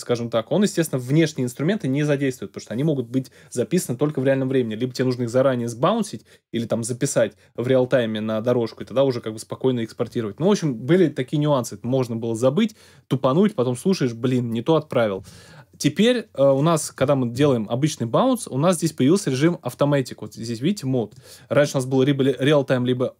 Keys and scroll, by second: 17.3 super+b.